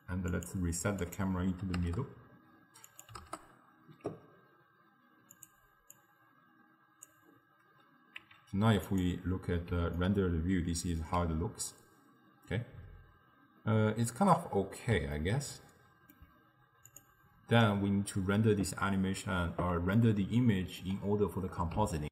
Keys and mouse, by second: 1.1-5.5 drag, 6.0-8.3 drag, 8.3 z, 10.0-13.1 ctrl+middle drag, 15.2-16.9 ctrl+middle drag, 16.9-20.0 drag, 20.0-22.1 ctrl+middle drag.